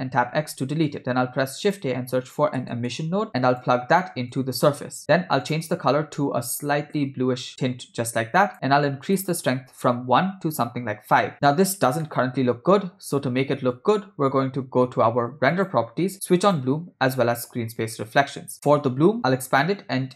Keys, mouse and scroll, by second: 0.5 x, 1.2 shift+a, 4.4-5.0 drag, 5.4 click, 9.1-11.2 drag, 12.1-13.8 shift+middle drag, 15.6 click, 16.6 click, 18.2 click.